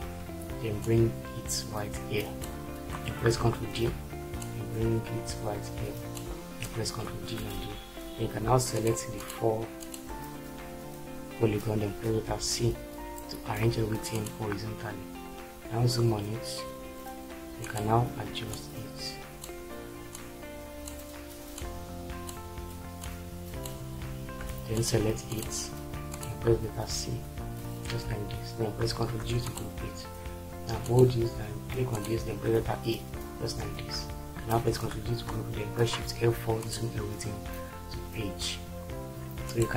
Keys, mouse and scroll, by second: 3.5 ctrl+d, 6.6 ctrl+d, 12.4 c, 26.7 shift+c, 28.9 ctrl+g, 32.6 shift+e, 34.7 ctrl+g, 36.0 shift+F4.